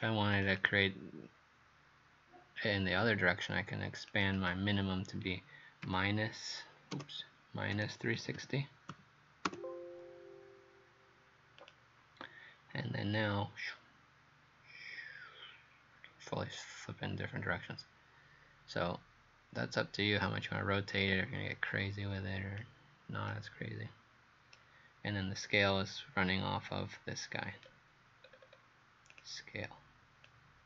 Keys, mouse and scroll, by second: 0.6 click, 4.1 click, 4.4 click, 5.9 KP_Decimal, 7.0 BackSpace, 7.8 KP_Subtract, 8.2 KP_3, 8.4 KP_6, 8.9 KP_0, 9.5 Return, 11.6 click, 23.3 right click, 27.5-27.9 scroll down 2, 28.3-28.8 scroll up 4, 29.2 click, 30.3 click.